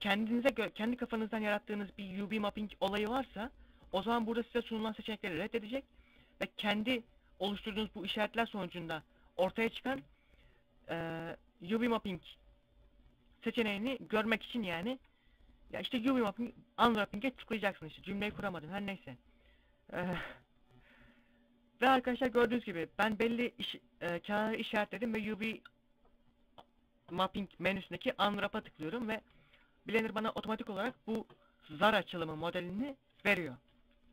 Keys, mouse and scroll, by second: 9.4 u, 22.1 u.